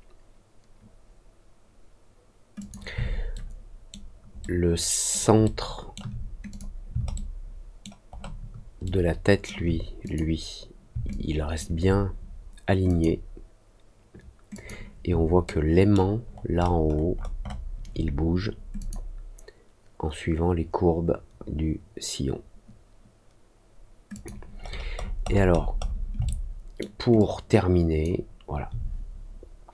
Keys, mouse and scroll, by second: 2.5 click, 3.3 alt+middle click, 4.3 alt+middle click, 5.4 alt+middle click, 6.4 click, 7.1 alt+middle click, 8.0 alt+middle click, 8.8 alt+middle click, 10.0 click, 11.0 alt+click, 12.8 click, 14.5 click, 15.4 alt+middle click, 16.2-17.6 alt+scroll up 5, 18.7 click, 24.1 click, 24.6 middle click, 24.9-25.9 scroll down 8, 26.2 alt+middle click, 27.1 alt+click.